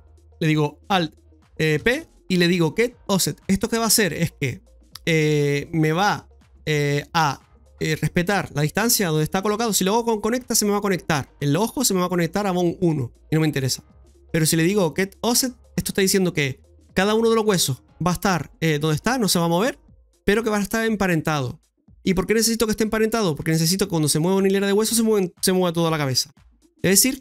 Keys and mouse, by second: 1.7 ctrl+p.